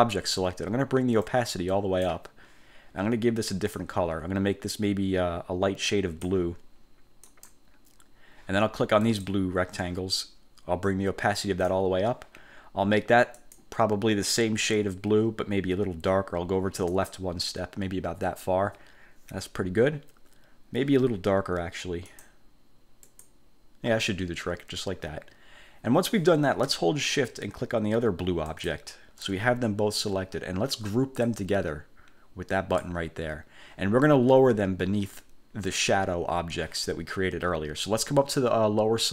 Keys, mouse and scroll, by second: 1.4 click, 3.9-6.6 drag, 7.4 click, 9.2 click, 11.0 click, 13.5 click, 17.0 click, 22.2 click, 23.2 click, 28.6 shift+click, 31.4-33.1 drag.